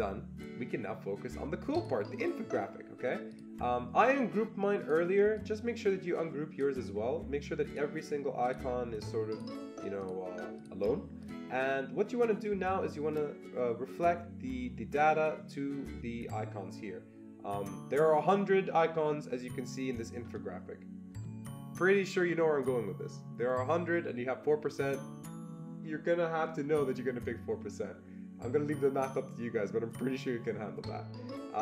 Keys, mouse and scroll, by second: 1.7 click, 1.8 click, 3.3 click, 4.8-8.4 drag, 8.4 click, 9.3 click, 10.0 click, 10.6 click, 11.2 click.